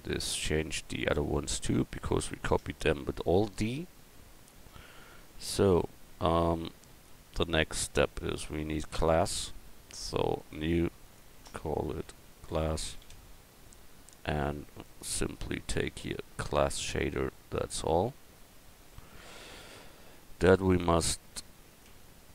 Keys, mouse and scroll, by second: 4.2-5.4 middle drag, 6.8-7.8 middle drag, 19.0 Tab, 21.4 Tab, 21.9 Tab.